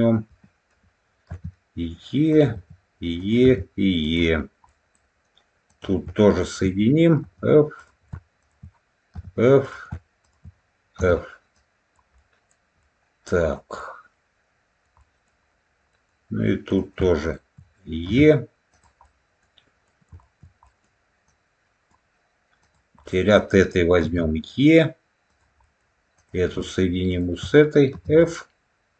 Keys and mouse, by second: 1.2 e, 2.2 click, 2.4 e, 3.1 click, 3.9 click, 4.6 middle click, 5.6 click, 6.3 shift+click, 7.1 f, 7.7 click, 8.3 shift+click, 9.0 f, 9.5 click, 10.1 shift+click, 11.4 click, 12.1 middle click, 12.7 middle click, 13.7-14.7 middle drag, 14.9 middle click, 15.8 middle click, 16.6 click, 17.1 shift+click, 18.0 e, 18.6 click, 18.9 middle click, 19.8 shift+middle click, 20.5 middle click, 22.9 middle click, 25.6 middle click, 28.1 middle click.